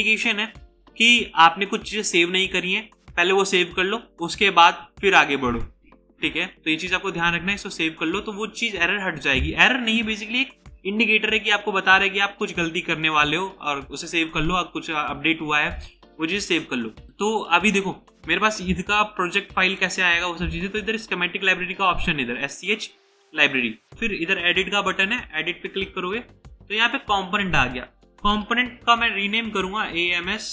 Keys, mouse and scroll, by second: 6.5 right click, 29.1-30.5 typing.